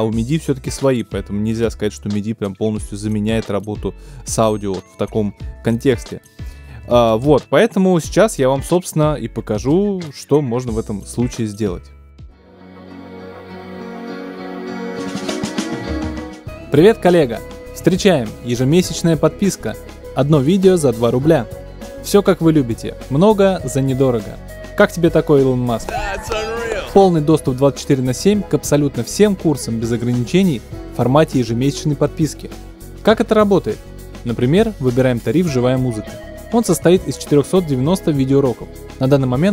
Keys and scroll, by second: 7.2 super+BackSpace.